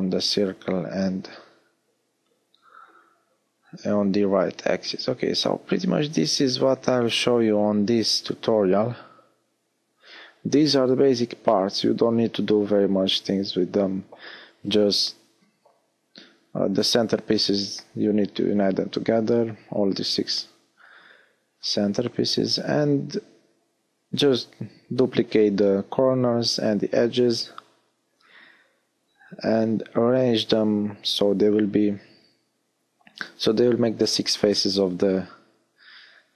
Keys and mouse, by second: 1.1 middle click, 11.4 e, 17.4 click, 23.6 e, 25.0-26.0 middle drag.